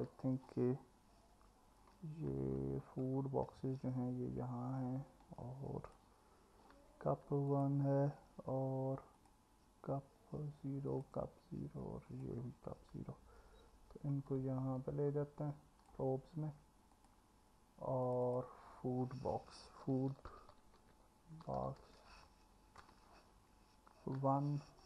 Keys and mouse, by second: 4.8-6.0 drag, 7.5 shift+click, 9.2 ctrl+click, 10.9 ctrl+click, 12.1 ctrl+click, 17.0 click, 18.3-24.8 drag, 20.5 o.